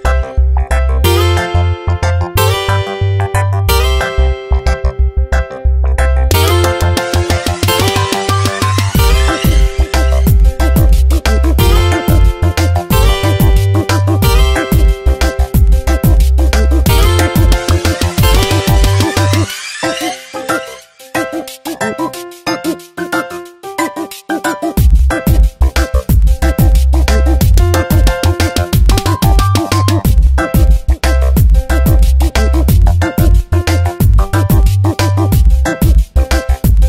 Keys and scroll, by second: 1.1 Return, 2.5 ctrl+shift+[, 3.7 v, 20.9 F9, 24.5 ctrl+t, 29.0 Return, 29.3 Tab, 29.7 ctrl+t, 32.2 Return, 32.5 v, 32.9 shift+Down, 34.7 Down, 35.1 ctrl+t.